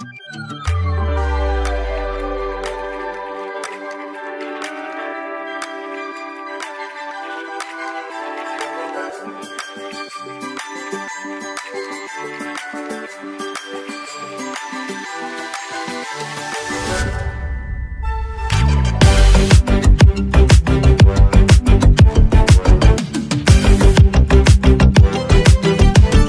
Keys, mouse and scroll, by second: 5.5-5.9 alt+scroll down 1, 6.7 alt+click, 8.3-9.2 alt+scroll up 1, 9.4 space, 9.5 click, 12.6 click, 20.2 alt+scroll up 1, 22.7 click.